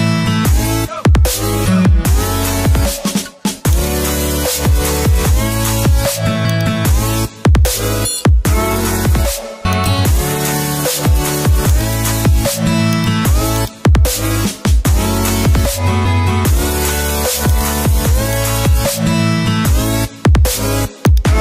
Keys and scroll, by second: 15.6 ctrl+t, 19.5 Return.